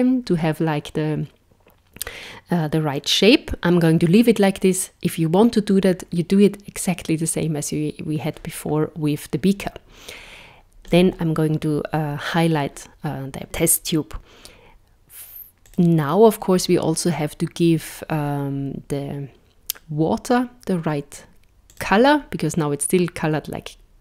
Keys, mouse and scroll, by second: 10.9 click, 15.7 click, 21.7 click.